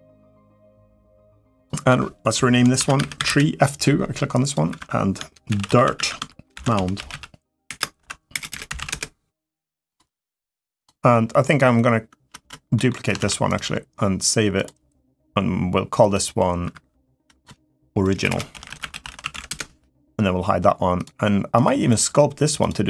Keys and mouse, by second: 1.6 F2, 2.9 e, 4.4 F2, 8.3 BackSpace, 12.5 middle click, 13.0 shift+d, 14.3 click, 16.4 F2, 18.0 BackSpace, 20.7 click, 21.3 click, 22.4 click, 22.7 middle drag.